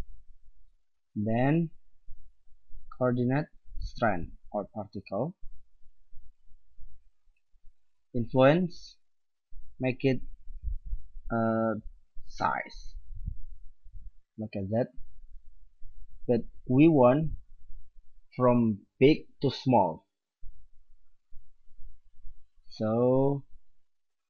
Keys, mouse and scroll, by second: 0.6 middle click, 2.5 click, 2.9-3.3 middle drag, 3.3-4.3 drag, 5.9 middle click, 9.0-10.8 drag, 11.2-14.7 drag, 22.3-24.2 middle drag.